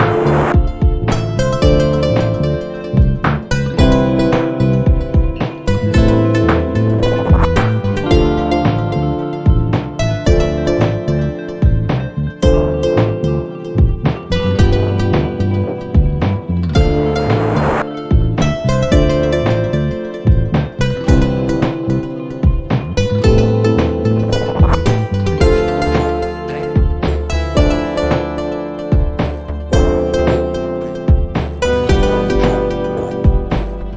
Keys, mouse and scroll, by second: 2.6 Return, 3.8 click, 4.4 click, 5.0 click, 6.4 right click, 7.9 click, 13.5 click, 15.2-16.2 typing, 19.0 click, 22.9 click, 23.6 click, 29.1 click, 32.2 click, 33.7 click.